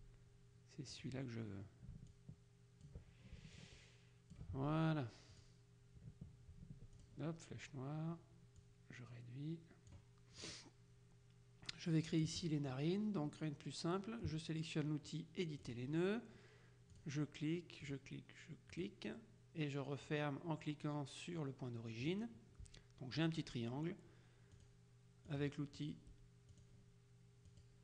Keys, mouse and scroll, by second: 1.0 click, 2.2 ctrl+click, 3.7 click, 5.4 click, 7.1 ctrl+click, 8.7-10.5 drag, 15.7 click, 17.1 click, 17.9 click, 18.9 click, 22.1 click, 24.7 click, 25.4 click, 26.7 click, 27.6 click.